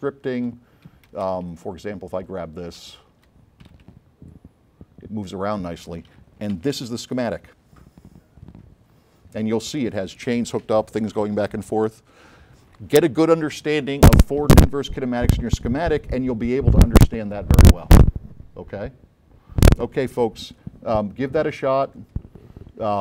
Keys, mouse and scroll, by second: 0.0 click, 1.1 space, 1.6 click, 2.4-4.5 typing, 4.4-5.9 drag, 6.6 a, 7.2-8.0 scroll up 5, 8.8-9.7 scroll up 6, 21.9 click.